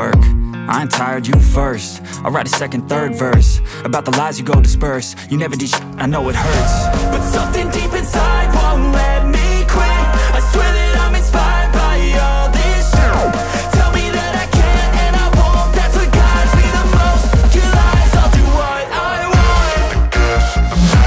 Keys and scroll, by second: 0.8-3.2 typing, 3.3 ctrl+s, 6.1-7.9 typing, 9.2 ctrl+c, 12.4 ctrl+s, 14.4 Return, 14.7-17.3 typing, 18.4-21.0 typing.